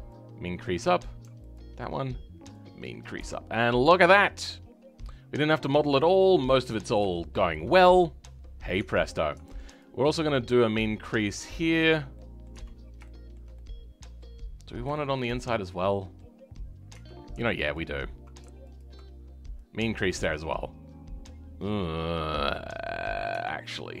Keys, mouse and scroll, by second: 0.2-3.3 drag, 3.3 scroll down 3, 3.6-5.7 middle drag, 5.7 scroll up 2, 7.1-8.7 shift+middle drag, 8.7 Tab, 9.8 alt+click, 12.1 middle click, 12.5 Tab, 13.0-14.4 shift+middle drag, 14.4 scroll up 2, 14.9-16.9 shift+middle drag, 16.9 Tab, 17.7 alt+click, 18.7 alt+click, 19.6 click, 20.4-21.1 scroll down 3, 21.1 scroll up 2, 21.7-23.3 middle drag, 23.3 Tab, 23.8-24.0 scroll up 1.